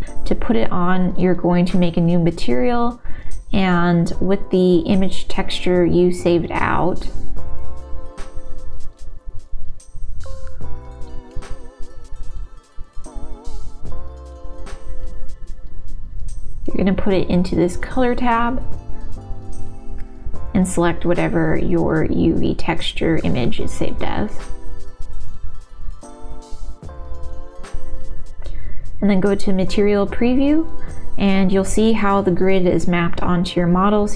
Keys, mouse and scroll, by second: 0.3 click, 1.2 click, 1.6-9.2 drag, 4.2 BackSpace, 6.4 BackSpace, 6.6 BackSpace, 13.1-14.8 drag, 16.2 click, 17.1-18.6 drag, 20.9-25.4 drag, 27.6-29.3 drag, 31.6 n, 34.0 click.